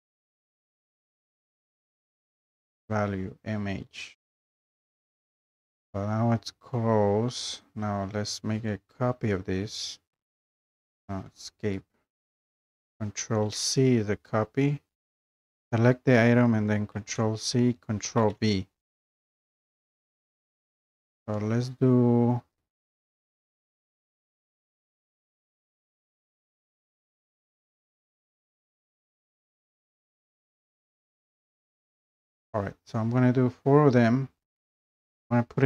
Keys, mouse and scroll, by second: 0.6 BackSpace, 4.6 click, 7.8 click, 9.6 ctrl+v, 11.6 Escape, 13.5 ctrl+c, 15.5 click, 16.9 ctrl+c, 18.2 ctrl+v, 23.0 click, 23.6 scroll up 1, 24.5 scroll up 1, 27.0 ctrl+v, 30.3 scroll, 30.4 ctrl+click, 31.4 scroll, 31.7 ctrl+v, 34.5 click, 35.1 scroll.